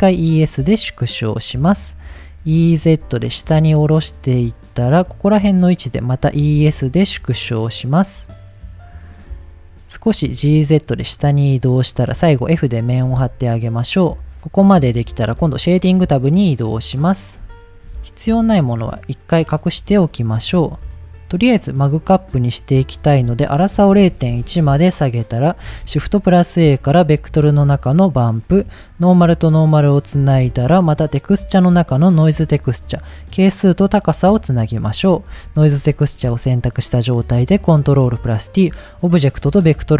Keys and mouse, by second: 1.7 click, 5.0 click, 6.5 e, 8.7 click, 10.2 g, 10.4 z, 11.7 click, 12.6 f, 13.1 Tab, 15.8 drag, 17.6 shift+middle click, 18.0 middle click, 18.6 shift+middle drag, 19.2-19.7 drag, 20.4 h, 21.0 click, 23.0-25.2 drag, 25.8 shift+a, 29.0-30.0 drag, 30.3 shift+a, 33.2-34.1 drag, 34.4 middle click, 35.1 click, 35.8 ctrl+t, 36.2 middle click, 37.2-37.7 drag.